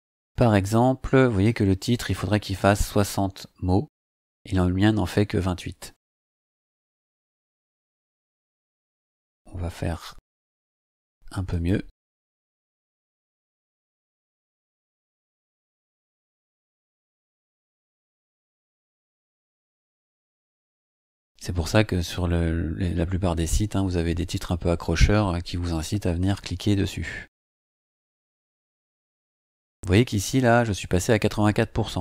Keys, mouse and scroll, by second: 10.4 click, 11.5 click, 12.9 space, 14.1-20.1 typing, 27.7 click.